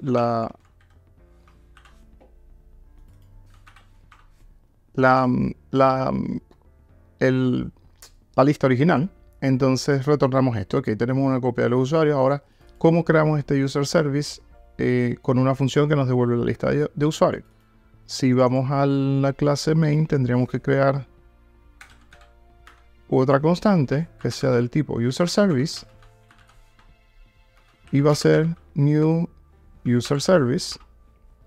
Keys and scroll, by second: 22.7 Tab, 25.6 Return, 29.0 Return.